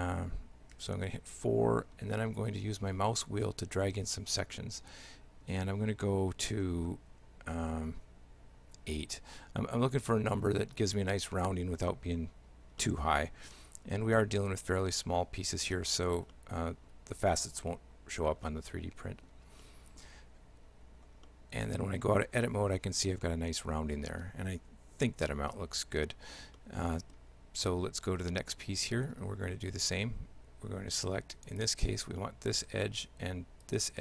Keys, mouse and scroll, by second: 12.8 middle click, 14.2 shift+middle click, 16.4 shift+middle click, 18.5 shift+middle click, 19.7 middle click, 20.7 Tab, 21.3 shift+middle click, 26.6 shift+middle click, 27.6 right click, 28.4 shift+middle click, 29.5 Tab, 31.5 right click, 32.2 shift+middle click, 33.7 shift+right click.